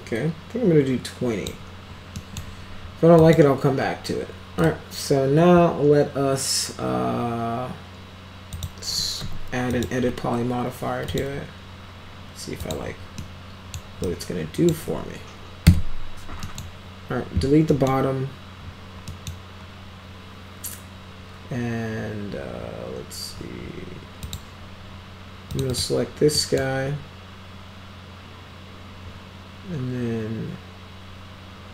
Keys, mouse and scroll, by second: 2.2 middle click, 3.2 click, 8.6 click, 9.2 e, 9.8 click, 10.0 e, 11.1 click, 12.6 click, 13.2-13.8 middle drag, 14.1 click, 15.7 Delete, 16.5 middle click, 17.7 middle click, 19.1 middle click, 24.2 click, 25.5 click, 25.7 click, 26.4 middle click.